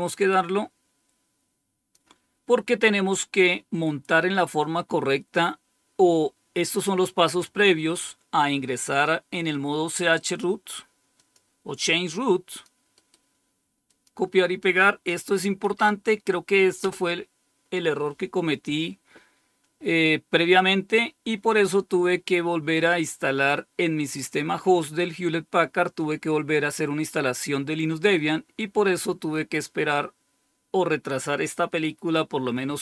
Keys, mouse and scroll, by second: 0.1-1.9 drag, 11.1 click, 12.4 click, 12.9 right click, 13.8 click, 15.6 Tab, 16.7 Return.